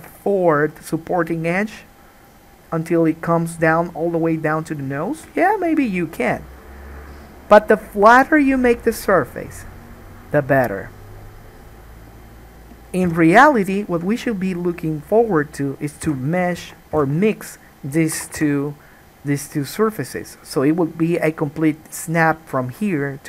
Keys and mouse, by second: 13.2 3, 13.3 click, 13.4 middle click, 14.1 shift+click, 14.3 middle click, 16.2 f, 16.8 alt+a, 17.2 1, 17.5 click, 18.3 x, 19.8-23.2 middle drag.